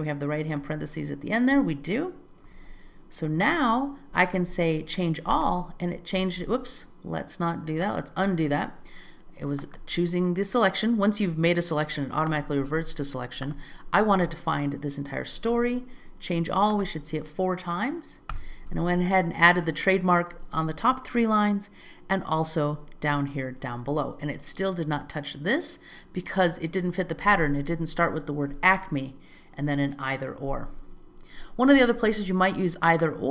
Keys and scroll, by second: 2.6 alt+z, 8.5 super+z, 18.4 Return.